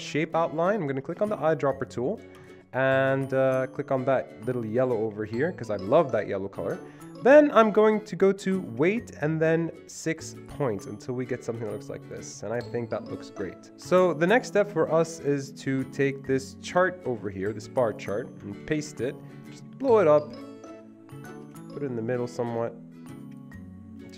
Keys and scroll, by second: 17.2 ctrl+c, 18.7 ctrl+v.